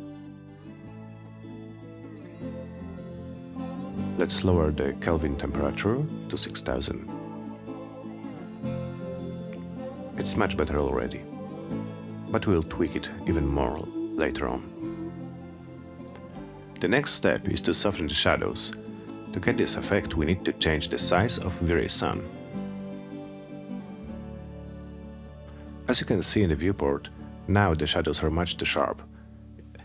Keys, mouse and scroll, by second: 0.9 click, 2.9-4.7 typing, 9.0 click.